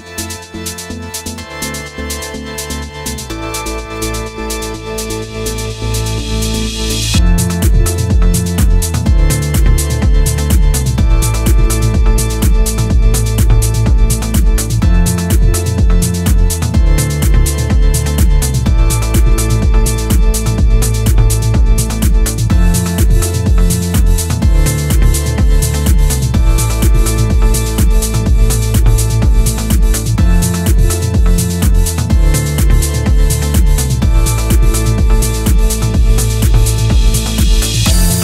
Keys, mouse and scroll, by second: 0.1-0.6 scroll up 4, 0.4 middle click, 0.8 click, 1.2 alt+click, 1.8 ctrl+b, 2.7 middle click, 3.3 click, 3.7 alt+click, 4.3 ctrl+b, 5.3-5.8 scroll down 4, 5.5 middle click, 6.1 shift+middle click, 6.3-6.6 scroll up 1, 6.7 scroll down 1, 6.9 shift+middle click, 7.3-8.2 scroll down 5, 7.7 Tab, 8.1 middle click, 20.6 click, 20.8 Tab, 21.3 Tab, 21.6 click, 21.8 click, 22.0 click, 23.0 KP_7, 23.7 shift+a, 27.8 s, 29.8 KP_1, 30.2-30.8 scroll down 1, 30.8-31.3 scroll down 1, 30.8 g, 32.1 r, 34.0 shift+middle click, 34.3 scroll up 3, 34.7 shift+middle click, 35.3-35.6 scroll up 1, 36.0 ctrl+a.